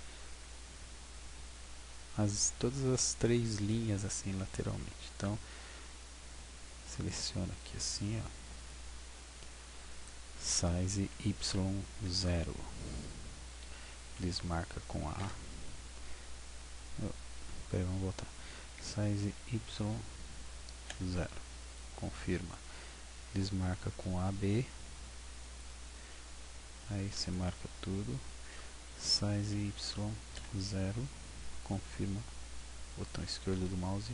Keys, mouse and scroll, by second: 0.4 w, 0.9 w, 5.1 a, 5.4 b, 10.5 s, 18.7 s, 23.1 a, 23.7 b, 28.9 s, 33.3-34.0 typing.